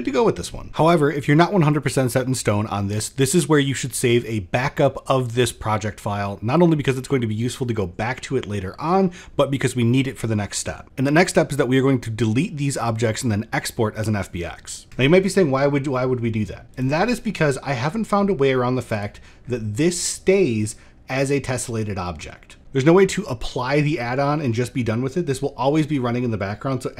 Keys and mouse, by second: 3.3 middle click, 3.9 click, 10.8 click, 11.1 x, 12.6-13.6 drag, 15.8 shift+middle drag, 16.0 shift+middle click, 18.5 click.